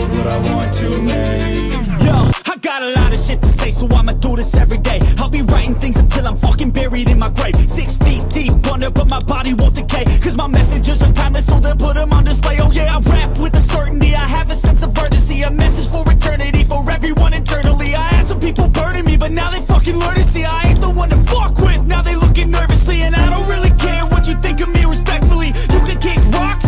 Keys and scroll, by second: 12.6 ], 12.8 ], 13.2 ], 14.5 [, 14.6 [, 15.4 ], 18.4 [, 18.5 [, 21.6 ], 21.8 ], 23.7 [, 24.7 [, 24.8 [, 26.6 [.